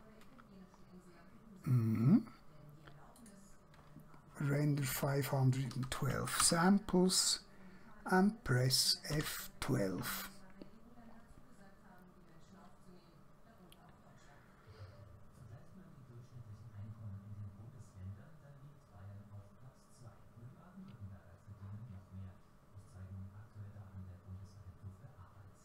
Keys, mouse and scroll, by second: 3.2 click, 4.9-5.8 typing, 6.5 Return, 9.2 F12.